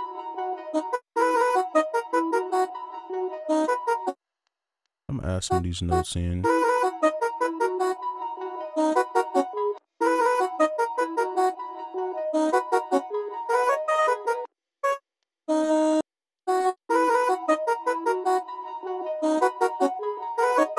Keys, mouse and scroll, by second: 0.9 space, 1.1 space, 2.3 click, 3.4 right click, 4.0 space, 5.8 double click, 6.4 space, 9.7 space, 10.0 space, 10.8 alt+click, 12.5 alt+click, 14.4 space, 16.7 right click, 16.8 space.